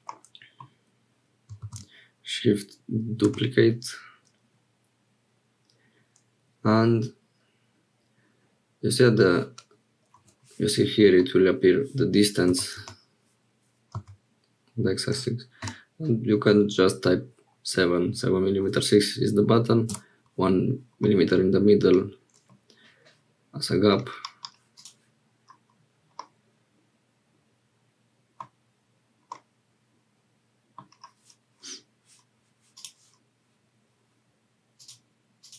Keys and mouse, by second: 0.1 middle click, 12.5 g, 21.0-22.6 middle drag, 23.9 middle click, 26.1-28.5 drag, 29.3-30.9 drag, 32.7 click.